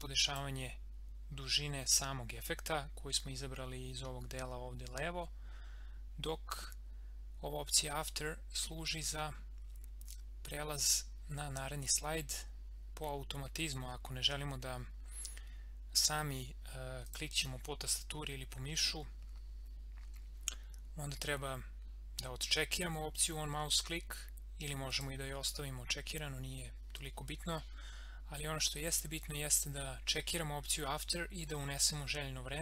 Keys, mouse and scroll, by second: 17.0 click, 24.9 click.